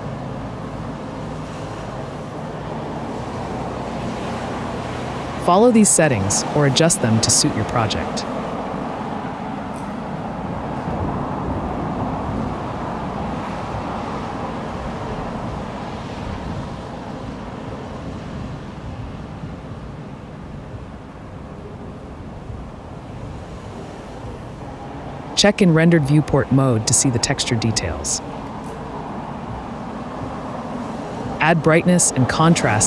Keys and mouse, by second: 0.7 click, 4.6 alt+shift+middle click, 7.2-8.7 shift+middle drag, 8.8-10.1 shift+drag, 10.2-11.4 shift+drag, 11.4-13.1 shift+middle drag, 13.1 shift+click, 14.7-15.7 shift+drag, 16.0 click, 17.3 click, 19.0-20.4 middle drag, 20.4 drag, 20.6-22.2 right drag, 25.5 alt+shift+click, 27.1 right click, 29.4 click, 30.8 click, 31.4 shift+a, 31.6 BackSpace.